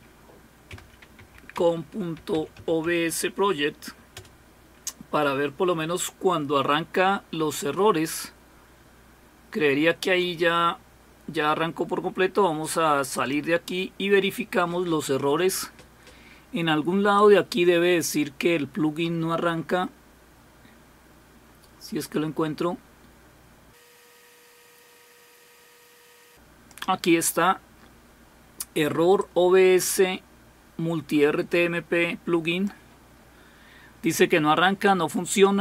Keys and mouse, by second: 0.0-3.1 typing, 4.2 typing, 13.1 click, 17.1-27.3 drag, 29.2-32.7 drag.